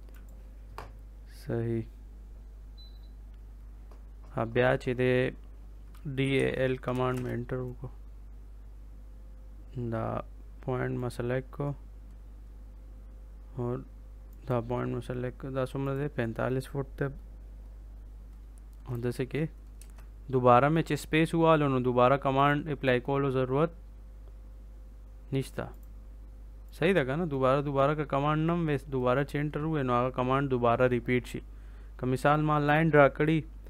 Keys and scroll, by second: 5.9-7.0 typing, 19.7 space.